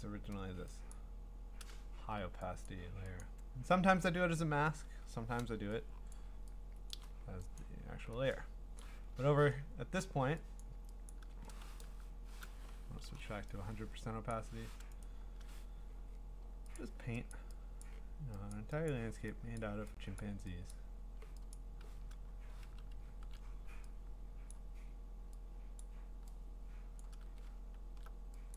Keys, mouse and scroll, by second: 0.9 click, 2.0 ctrl+z, 2.7 click, 3.2 click, 6.1 scroll, 6.1-8.2 drag, 8.8 click, 9.2-9.9 scroll, 10.6 click, 11.1 click, 14.3 click, 15.1 right click, 16.9 click, 17.3 click, 17.8 click, 18.5 click, 18.9 click, 19.6 click, 20.2 click, 20.7 click, 21.5 click, 23.0 !, 24.5 click, 25.8 click, 27.4 scroll, 27.8 middle click.